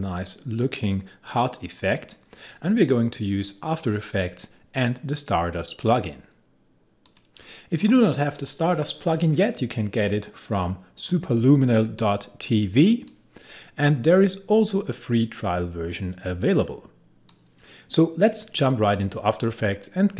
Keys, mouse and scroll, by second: 7.0 click, 11.0-17.3 drag, 17.3-20.1 drag.